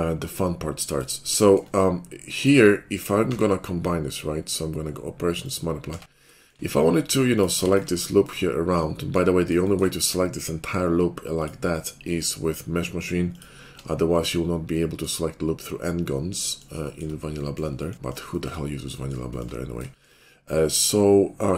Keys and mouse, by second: 3.2 q, 5.9 Tab, 7.3 click, 7.8 alt+click, 7.8-9.5 middle drag, 9.5 shift+click, 9.8-13.0 middle drag, 13.0 alt+click, 13.7-21.5 middle drag.